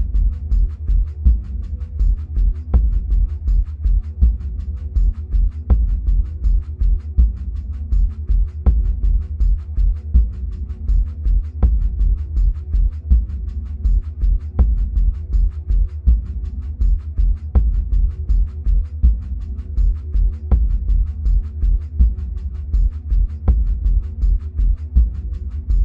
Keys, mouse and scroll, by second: 2.0-3.7 scroll down 2, 3.7-9.3 middle drag, 4.5 scroll up 2, 5.4-9.3 scroll down 1, 15.2-16.2 middle drag, 16.2-16.6 scroll up 2, 16.6-17.8 scroll down 2, 17.8 scroll down 1, 17.9-22.1 shift+middle drag, 22.1 click, 22.9 click, 23.3 Tab, 24.9 2, 25.6 click.